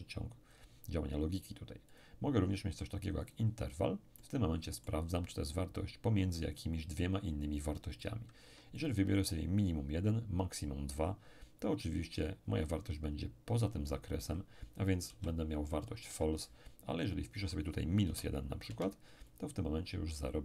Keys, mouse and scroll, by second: 1.9 click, 3.3 click, 4.2-5.8 middle drag, 8.0 click, 8.4 2, 15.1 p, 16.1 Escape, 17.3 click, 18.1 -, 18.7 1, 19.3 click.